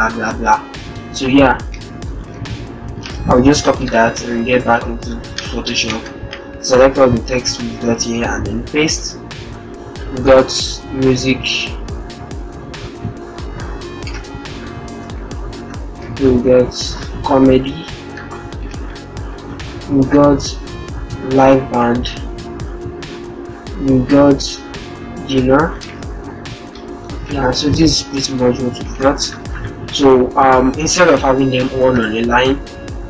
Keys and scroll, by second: 2.0 ctrl+z, 2.9 ctrl+c, 5.8 ctrl+a, 7.8 ctrl+v, 13.8 shift+m, 15.0 ctrl+Down, 16.0 ctrl+Right, 21.7 ctrl+Right, 22.5 Right, 25.4 Return, 27.0 -, 27.4 0.